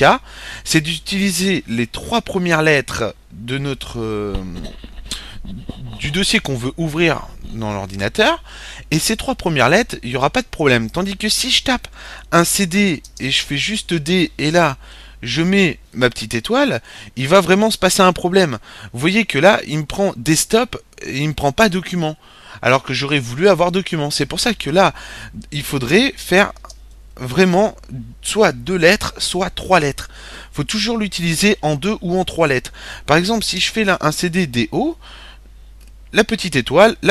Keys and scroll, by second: 11.7-13.2 typing, 14.8 typing, 16.2 typing, 24.7-25.4 typing, 26.8-27.3 typing, 32.5-34.2 typing, 35.7-36.4 typing.